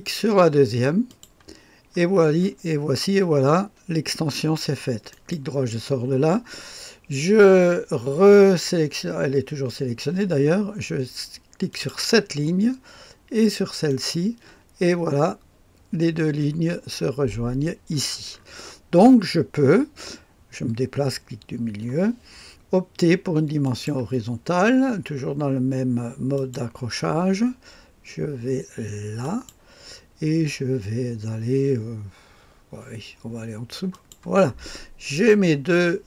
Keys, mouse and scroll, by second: 1.0 click, 2.3-5.0 scroll up 1, 5.0 right click, 11.6 click, 13.8 click, 14.2 click, 16.3-17.0 scroll up 2, 17.8-18.7 scroll down 3, 21.9 middle click, 23.5 click, 26.3 click, 29.1 click, 33.8 click, 35.0 right click.